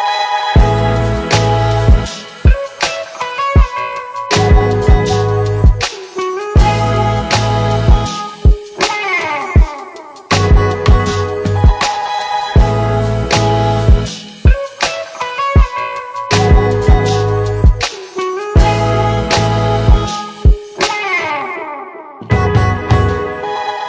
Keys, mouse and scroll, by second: 0.6 click, 6.7 click, 8.0 shift+click, 9.5 ctrl+shift+c, 10.3-13.2 typing, 15.2 6, 16.7 Return.